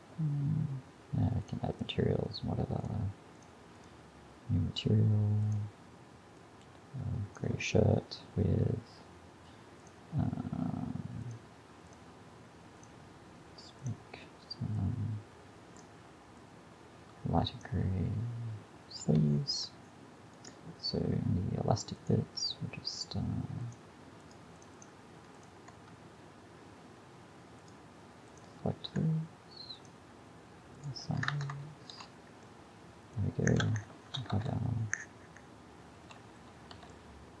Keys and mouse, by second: 19.1 a, 19.4-20.4 middle drag, 26.1 Tab, 31.3 Tab, 32.0 a, 34.0 shift+Left, 34.4 alt+a, 36.1 alt+a, 36.8 a.